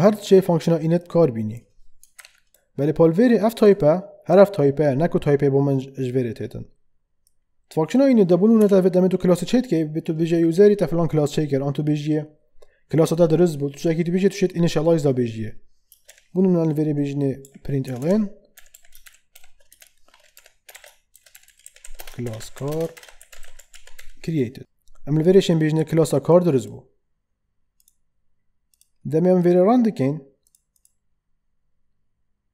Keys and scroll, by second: 2.2 ctrl+/, 8.5 BackSpace, 16.0 p, 17.4-24.2 typing, 20.3 Left.